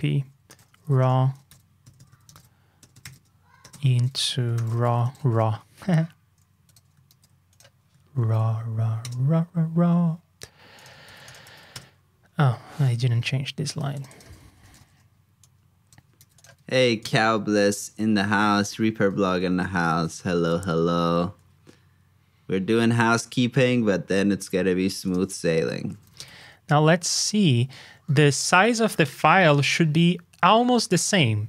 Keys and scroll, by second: 7.0 super+c, 8.2 super+v, 11.0 super+c, 11.4 super+v, 16.1 super+c, 16.5 super+v, 19.8 super+b.